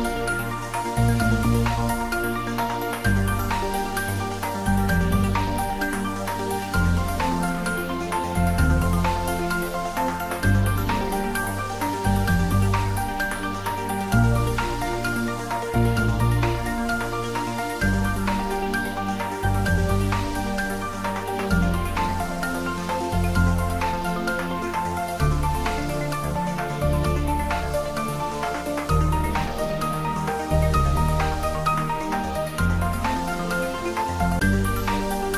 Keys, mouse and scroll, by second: 0.9-5.7 drag, 7.2-7.5 scroll up 1, 8.1 middle click, 8.8-9.3 scroll up 2, 9.9 click, 11.5-12.7 typing, 13.4 Return, 15.2 click, 17.2 1, 18.8 6, 19.5 Return, 22.4 Tab, 24.1-24.5 scroll down 1, 26.7-30.7 middle drag, 30.7-33.5 scroll up 1, 34.6-35.2 scroll down 1, 35.2-35.3 middle drag.